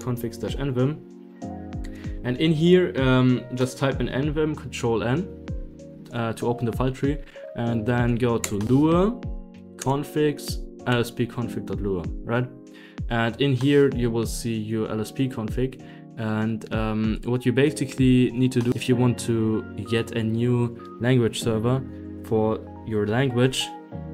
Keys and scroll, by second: 0.0-2.6 typing, 1.1 Right, 1.3 Return, 5.7 End, 6.2 Home, 8.4 Return, 9.4 Down, 9.7 Return, 10.0 Down, 10.4 Down, 10.6 Down, 10.8 Return, 18.0 i.